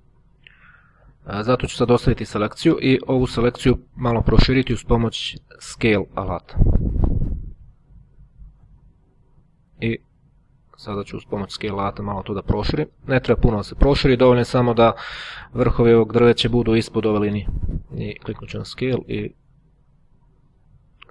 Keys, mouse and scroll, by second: 0.9 click, 5.2 click, 9.1 click, 10.4 click, 11.9-17.2 drag, 18.1 click.